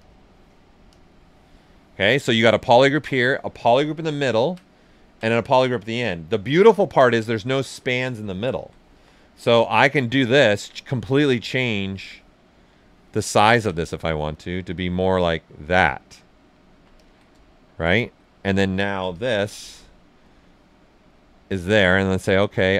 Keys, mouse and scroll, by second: 3.2-3.7 typing, 3.7 click, 4.0 ctrl+right click, 4.9 ctrl+alt+right click, 5.5-6.7 ctrl+right drag, 8.1 ctrl+click, 8.9 w, 10.1 click, 11.0 alt+click, 11.8-13.1 drag, 13.1 alt+right click, 13.9-16.2 ctrl+drag, 16.2 ctrl+right click, 16.9 ctrl+click, 17.6 shift+f, 18.0 w, 19.1 shift+click, 19.4 shift+q, 20.2 shift+click, 21.0 ctrl+shift+right click, 21.5 ctrl+right click, 22.4 ctrl+right click.